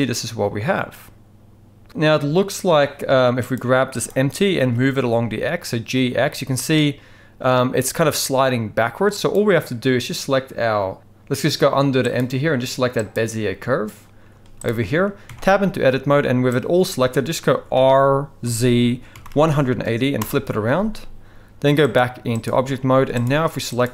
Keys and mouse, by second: 3.5 click, 4.0 click, 4.6 g, 12.1 click, 14.3 z, 15.2 Tab, 16.5 click, 17.8 r, 21.9-22.4 drag, 22.9 z.